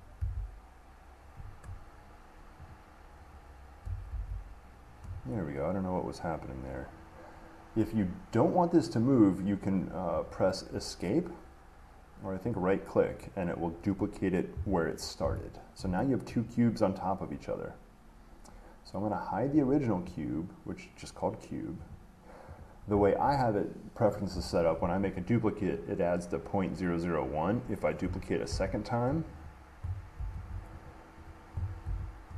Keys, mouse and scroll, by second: 0.0-2.0 drag, 2.9-6.1 drag, 12.7 right click, 15.4 right click, 16.0 shift+middle click, 16.5 middle click, 20.4 click, 22.1 click, 22.8 click, 28.2 click, 28.7 d, 29.7 click, 30.4 d, 31.1 click, 31.5 click, 32.1 d.